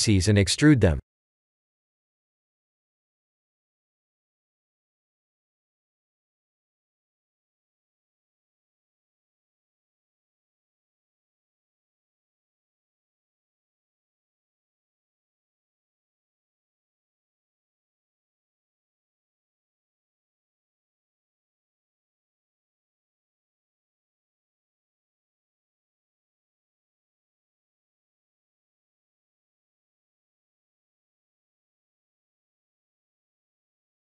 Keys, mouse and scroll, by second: 0.0 1, 0.5 b, 1.6 x, 5.8 e, 11.9 middle click, 12.4 shift+z, 13.1 middle click, 15.1 shift+middle click, 15.7 2, 18.0 click, 20.0-21.0 scroll up 5, 21.0 middle click, 23.2 KP_3, 23.5 scroll up 4, 24.4-25.9 scroll down 6, 25.9 scroll down 1, 26.7-27.7 scroll down 1, 27.7 scroll down 1, 28.8-29.7 scroll down 4, 29.9 shift+middle click, 30.4 shift+middle click, 31.4 Tab, 32.1 Tab, 32.4 1.